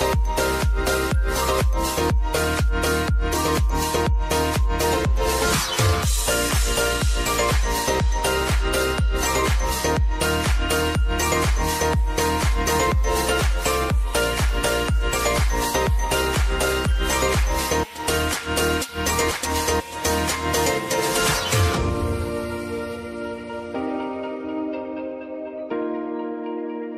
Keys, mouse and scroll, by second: 0.3 space, 2.6 click, 3.1 space, 11.6 space, 12.3 click, 12.6 t, 13.5 click, 13.7 space, 17.2 space, 17.8 click, 18.5 Return, 19.6 click, 20.0 space, 26.0 space, 26.8 click.